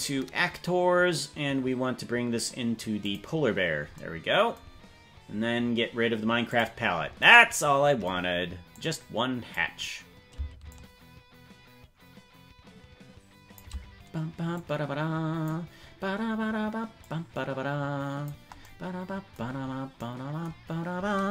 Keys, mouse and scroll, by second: 6.5 click, 8.7 click, 10.7-13.6 shift+drag, 14.5 click, 17.0-18.3 drag.